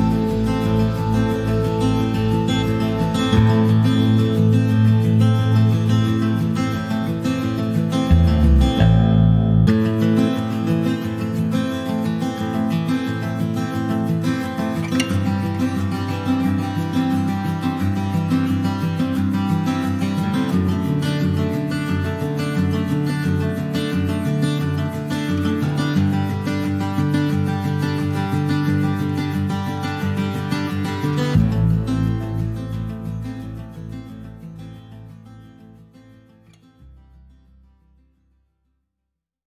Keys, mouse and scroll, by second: 0.0 click, 2.0 click, 2.3-11.7 middle drag, 11.7-12.7 right drag, 12.7-13.1 scroll down 2, 13.1 click, 13.4 middle click, 14.1 right click, 14.2 middle click, 14.6 ctrl+s, 14.7 click, 15.2 middle click, 15.3 s, 16.9 scroll down 2, 17.1 middle click, 17.3 scroll up 1, 17.6 s, 18.3 click, 18.6-20.4 middle drag, 20.4 click, 20.7 middle click, 25.1 shift+middle click, 26.0 shift+d, 27.1 click, 28.5 scroll down 2, 28.7 middle click, 28.9 scroll up 1, 29.1 shift+middle click, 29.7 click, 30.6 scroll down 2, 30.9-32.6 middle drag, 32.6 click, 33.6 s, 34.7 shift+d, 36.8 middle click, 37.1 s, 38.7 click, 39.1 middle click.